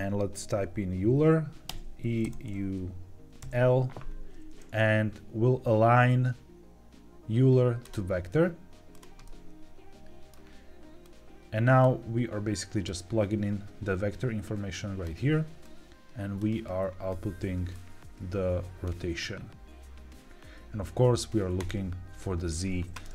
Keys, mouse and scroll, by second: 9.2-10.2 middle drag, 10.9 click, 11.7 click, 12.8-14.9 drag, 15.6 click, 17.6-18.7 drag, 21.5 click.